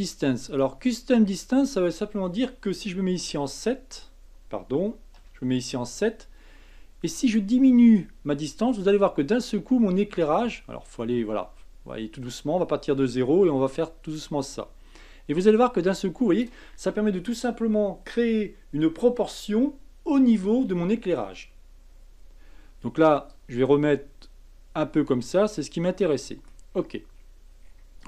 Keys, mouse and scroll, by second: 0.5-3.2 drag, 3.2 KP_7, 5.1 KP_7, 7.3-10.3 drag, 23.3-25.5 drag, 25.5-26.7 middle drag, 26.7-27.6 scroll up 5, 27.6-28.0 scroll down 5.